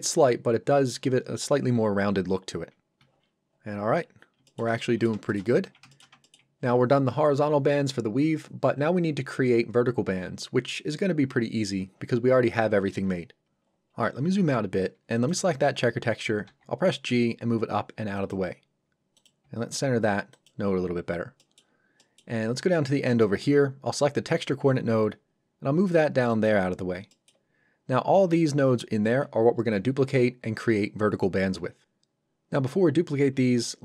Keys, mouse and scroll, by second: 3.0 Return, 3.5 scroll down 1, 4.5 middle click, 4.8 middle click, 5.3 shift+middle click, 5.8 shift+Return, 5.9 shift+middle click, 6.2 ctrl+middle click, 13.6-13.9 scroll down 1, 15.1 click, 16.4 g, 18.1 click, 19.4 g, 20.3 click, 20.9-21.4 scroll down 1, 21.4 middle click, 22.5-22.8 scroll down 1, 23.1 click, 24.8 g, 26.3 click, 27.1 middle click, 33.3 scroll up 1.